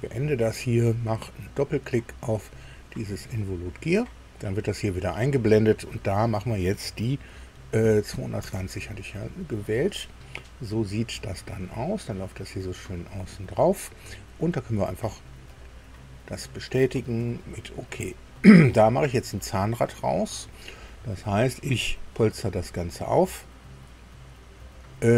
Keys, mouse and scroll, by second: 2.4 click, 5.9 click, 7.8 KP_2, 8.4 KP_2, 8.4 KP_0, 10.4-10.9 scroll up 1, 13.1-13.4 scroll down 1, 15.5 click, 17.3 shift+middle click, 18.2 shift+scroll down 2, 22.5 click, 24.6 click.